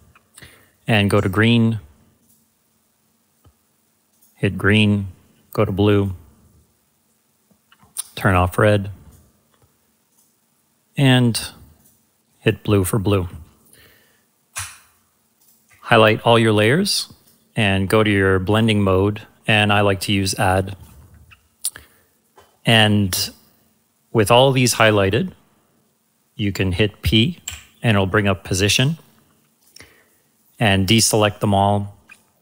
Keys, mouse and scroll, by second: 2.2 click, 14.5 click, 15.4 shift+click, 17.2 click, 20.8 click, 27.4 p, 29.6 click, 32.0 click.